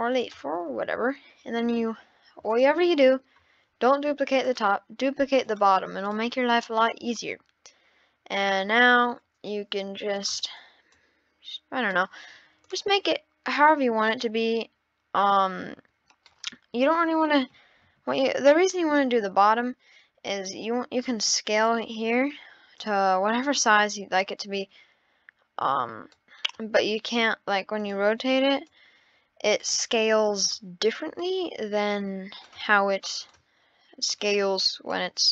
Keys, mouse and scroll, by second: 2.5 click, 4.4 click, 5.5 click, 6.1 click, 6.8 click, 10.1-11.0 drag, 12.6-13.7 drag, 15.3 click, 17.9 ctrl+z, 18.1 ctrl+z, 20.4 ctrl+z, 21.0 click, 21.9 ctrl+z, 22.8 click, 27.8 click, 30.4-31.3 drag, 32.4 click, 33.2 click.